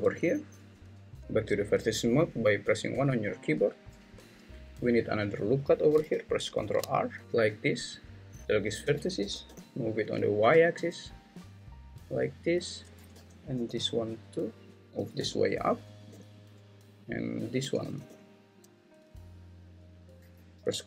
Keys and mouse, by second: 1.2 ctrl+z, 1.2 1, 2.9 1, 6.6 ctrl+r, 9.2 g, 9.5 y, 11.5 click, 13.1 g, 13.5 y, 15.2 g, 16.1 y, 17.8 g, 18.0 y, 19.9 click.